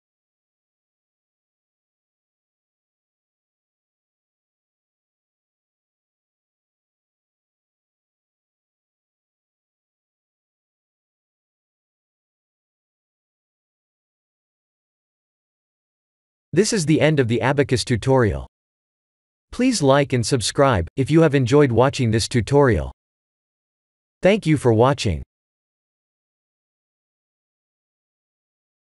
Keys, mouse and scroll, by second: 1.0 click, 13.0 click.